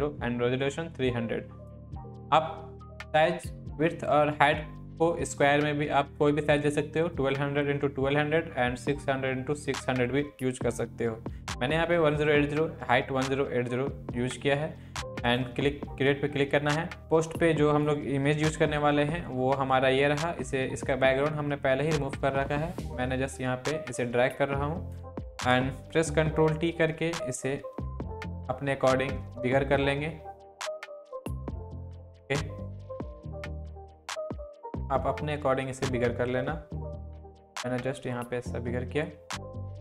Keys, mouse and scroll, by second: 15.2-17.9 drag, 20.2-23.6 drag, 26.2 ctrl+t, 28.2-31.7 alt+drag, 35.6-39.7 drag.